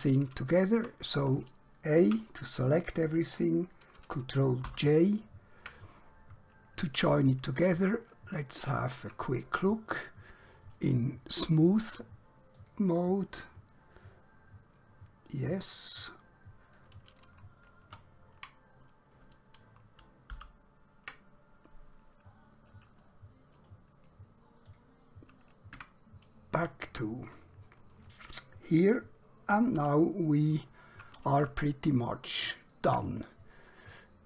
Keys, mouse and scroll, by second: 2.1 a, 4.7 ctrl+j, 6.8 scroll down 1, 8.2 shift+middle click, 9.6-10.2 scroll down 1, 10.8 right click, 12.6 click, 13.8 middle click, 17.8 ctrl+2, 20.4 ctrl+0, 23.6 right click, 24.7 click, 25.8 Tab, 29.8 KP_7, 32.0 shift+middle click, 33.9 middle click.